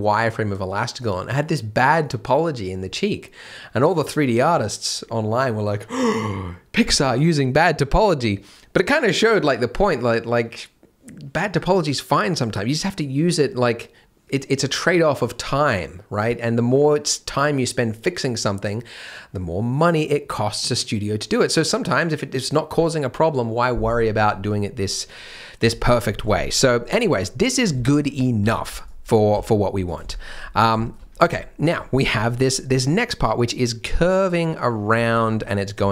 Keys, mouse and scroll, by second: 26.1 scroll down 1, 26.3 shift+middle click, 26.6-27.7 scroll up 1, 27.8 shift+middle click, 28.5 alt+a, 28.6 b, 29.3 g, 30.1 shift+m, 30.4 scroll down 1, 30.8 shift+m, 30.9-31.4 scroll up 1, 32.0 scroll down 1, 35.7 scroll up 1.